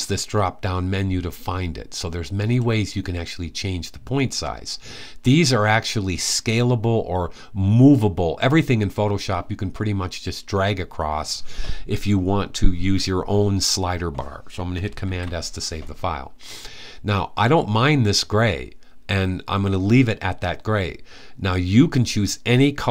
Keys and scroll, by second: 14.8 super+s.